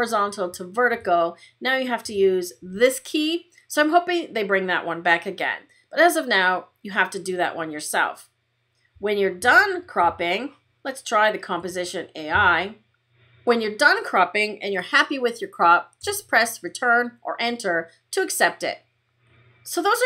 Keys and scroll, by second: 15.9 Return.